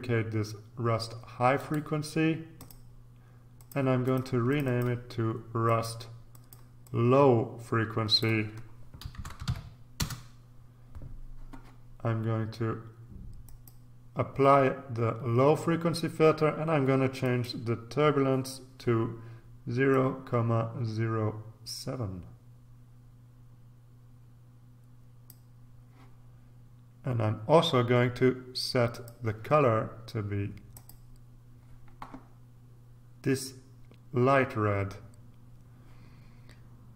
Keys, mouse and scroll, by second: 1.5 click, 2.6 click, 3.6-5.4 drag, 5.6-8.7 drag, 8.9-9.9 typing, 9.9 Return, 13.4 click, 17.2 click, 19.9-25.8 drag, 28.9 click, 30.7 click.